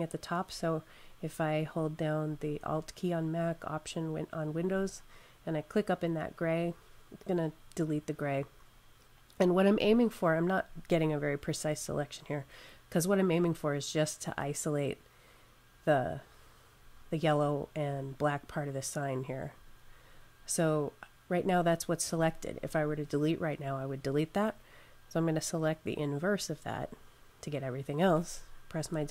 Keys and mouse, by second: 4.4 alt+click, 25.0 click.